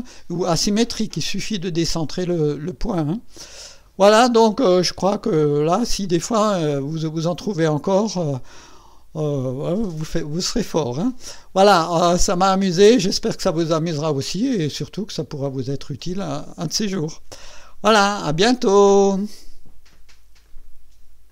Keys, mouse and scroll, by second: 0.7 click, 4.0 scroll up 2, 4.5 right click, 5.4-6.3 drag, 7.2-11.5 drag, 12.7 right click, 13.4 click, 14.7-16.8 drag, 19.0 right click.